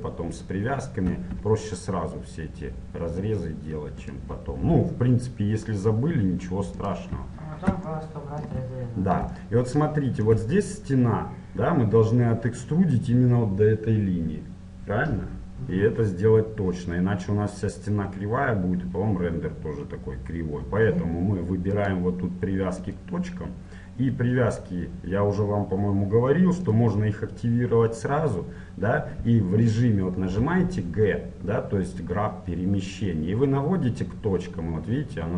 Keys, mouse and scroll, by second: 1.1 e, 4.5 e, 8.0-11.3 middle drag, 21.8-23.6 drag, 26.7-28.6 drag, 30.4 g.